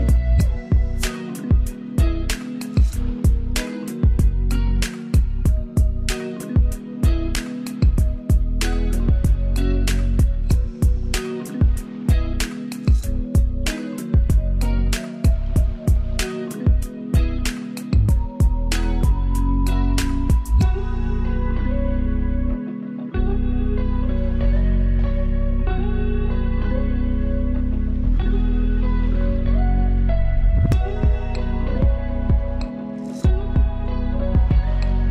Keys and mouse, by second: 0.9-2.3 shift+drag, 2.3 ctrl+space, 2.5 ctrl+click, 2.8 ctrl+space, 3.3-6.9 drag, 6.9 ctrl+space, 7.2 ctrl+click, 7.4 ctrl+space, 9.9-21.7 drag, 21.7-25.5 drag, 25.5 click, 26.1 ctrl+space, 27.1 ctrl+click, 27.3 ctrl+space, 28.8 ctrl+alt+click, 29.8 ctrl+space, 30.1 ctrl+click, 30.3 ctrl+space, 31.3 space, 31.5 click, 31.8 space, 32.3 ctrl+click, 32.6 ctrl+space.